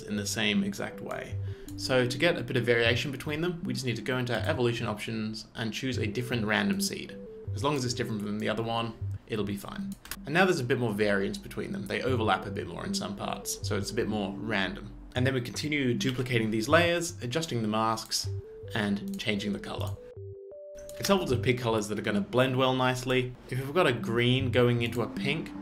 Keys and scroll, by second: 16.1 ctrl+space, 16.3 d, 21.0 space.